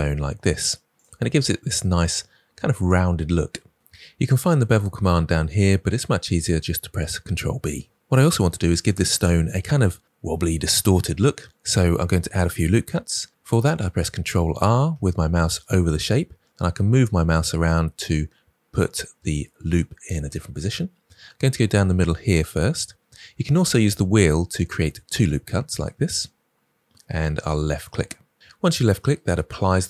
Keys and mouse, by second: 15.0 ctrl+r.